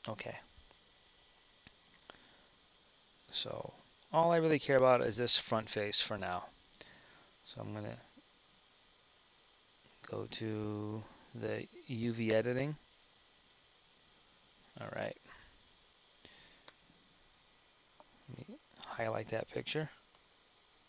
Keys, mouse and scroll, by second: 2.0 KP_1, 9.7-12.7 drag.